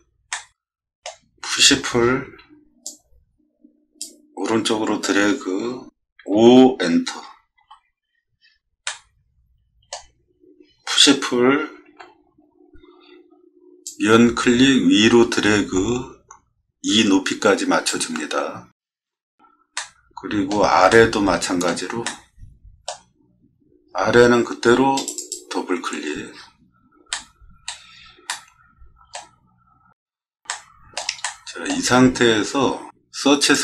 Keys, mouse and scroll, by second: 0.3 middle click, 2.8-4.0 drag, 6.2 5, 7.6 Return, 8.8-9.9 middle drag, 11.8 p, 13.8-17.8 drag, 19.7 middle click, 20.9 middle click, 22.0 middle click, 23.4 middle click, 23.5 middle click, 24.9 click, 25.2 click, 26.3 middle click, 27.1 middle click, 28.2 middle click, 29.6 middle click, 29.7 middle click, 30.4 shift+middle click, 31.2 middle click, 32.3 middle click, 33.5 click.